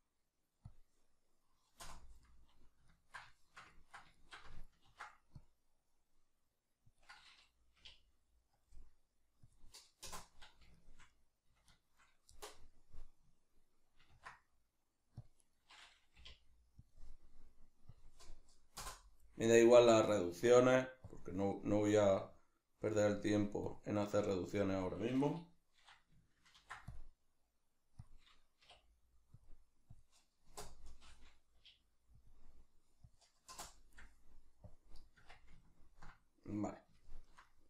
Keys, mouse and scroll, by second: 4.8 ctrl+r, 7.0 click, 7.8 k, 10.6 Return, 10.7-15.5 shift+middle drag, 14.1 ctrl+r, 15.5 right click, 16.2 k, 21.0 click, 23.6 click, 24.3-28.1 shift+middle drag, 26.6 ctrl+r, 28.1 click, 28.6 k, 34.7 click, 35.2 Tab, 35.6-37.6 ctrl+middle drag.